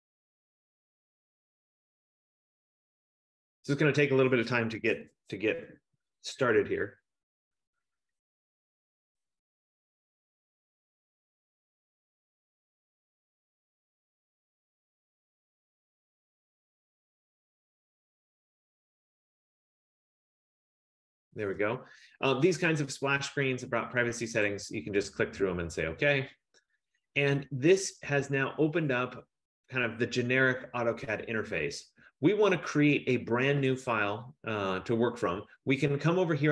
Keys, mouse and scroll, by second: 1.3 click, 23.6 click, 24.6 click.